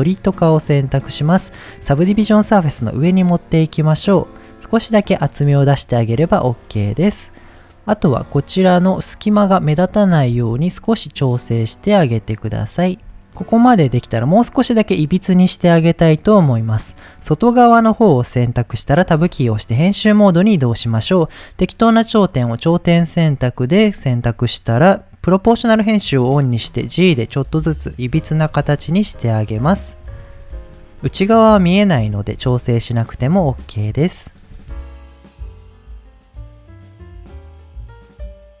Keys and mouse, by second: 0.0 click, 1.2-2.2 drag, 3.9 click, 4.6 click, 5.3-5.6 middle drag, 6.0-6.5 middle drag, 6.8-7.1 middle drag, 7.6 middle drag, 8.3-8.8 middle drag, 9.3 middle click, 9.9 click, 10.3 s, 12.4 right click, 13.0 s, 15.9-16.3 middle drag, 19.2 Tab, 20.4 click, 23.3 click, 26.1 g, 27.9 click, 28.2 middle click, 28.7 click, 28.9 g, 29.3 click, 30.0 click, 30.7 click, 31.1 middle click, 31.9 click, 32.1 g, 33.5 click, 33.9 click, 34.5 g, 35.0 click, 35.5 click, 35.9 g, 36.2 click, 36.5 g, 36.9 click, 37.3 click, 37.3 middle click, 37.6 click, 37.6-38.6 typing, 37.9 click, 38.0 click, 38.3 click, 38.4 middle click.